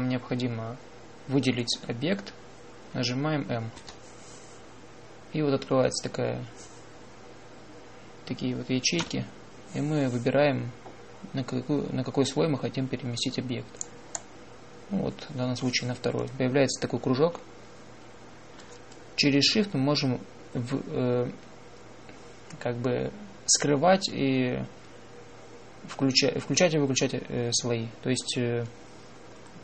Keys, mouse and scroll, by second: 4.6 m, 9.8 m.